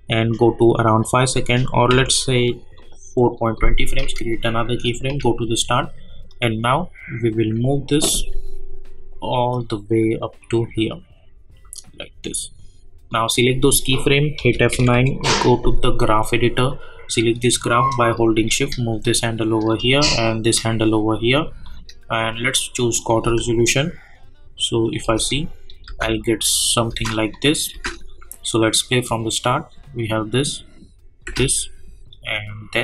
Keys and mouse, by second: 0.7 click, 1.9 =, 2.7-4.6 drag, 5.1 j, 6.3-9.5 drag, 9.5-14.3 drag, 14.3 F9, 14.7 typing, 16.0-19.7 drag, 19.7-21.6 drag, 21.6 click, 23.2 space, 25.7 click, 25.8 space, 27.3 click, 27.7 space, 31.2 space, 32.1 click.